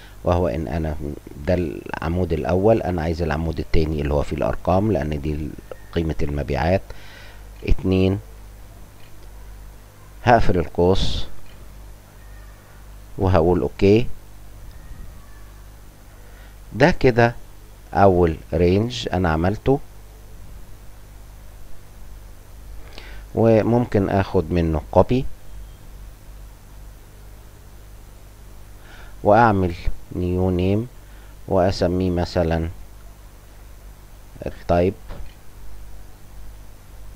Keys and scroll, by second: 7.5 2, 11.3 shift+0, 15.0 Insert, 32.7 Print, 35.4-37.1 typing.